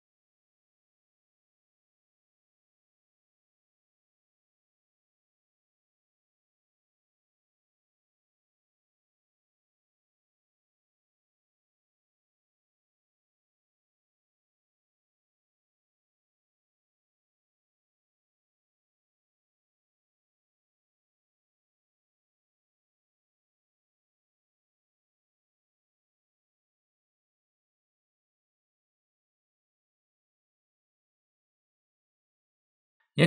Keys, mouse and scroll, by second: 2.8 middle click, 5.4 g, 15.3 click, 20.1 g, 26.6 click, 30.8 g.